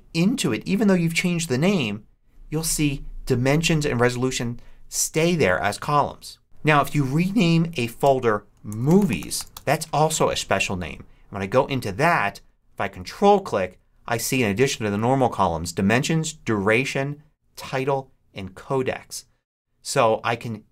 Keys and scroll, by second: 7.9 Return, 8.4 shift+Return, 8.6-9.2 typing, 9.4 Return.